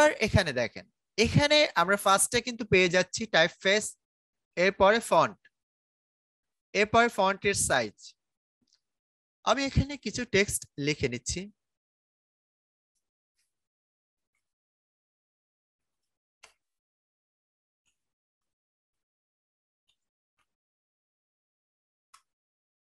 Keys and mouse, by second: 9.8 click, 13.7-20.3 typing, 22.0 Return.